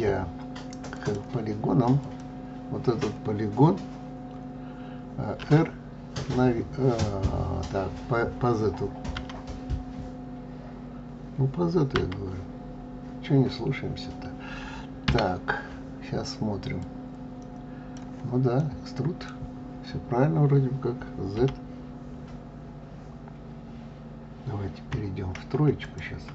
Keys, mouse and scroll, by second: 0.9 click, 1.9 click, 5.3 r, 16.7-18.5 drag, 18.5-21.3 middle drag, 21.3 z, 26.2 KP_1.